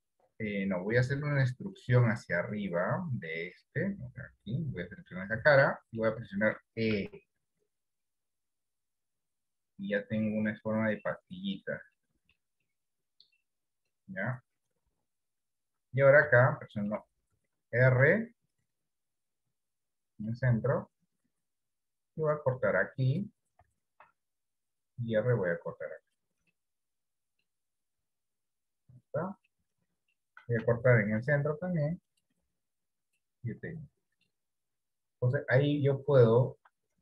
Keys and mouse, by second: 1.9 click, 2.9 middle click, 5.0 KP_1, 6.0 shift+middle click, 7.4 e, 10.6-12.0 middle drag, 12.2 shift+middle click, 12.9 middle click, 15.1 KP_3, 16.7 shift+middle click, 18.2 ctrl+r, 24.2 ctrl+r, 26.7 middle click, 28.3 KP_1, 29.9 middle click, 31.3 ctrl+r, 33.5-34.6 middle drag.